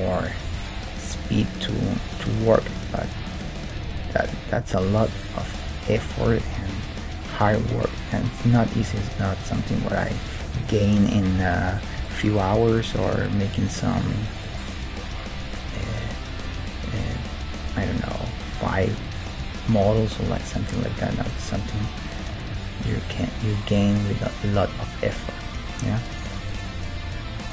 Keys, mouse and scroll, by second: 0.5-2.2 right drag, 0.7 g, 2.7-4.5 right drag, 3.2 g, 4.8-7.4 right drag, 6.2 g, 8.0-10.2 right drag, 8.7 g, 12.1-16.4 middle drag, 15.3-17.1 right drag, 15.6 g, 16.9 g, 18.5-23.2 right drag, 19.4 g, 20.7 g, 21.6 g, 22.8 g, 23.5-26.4 right drag, 23.7 g, 24.7 g, 26.4-27.5 middle drag.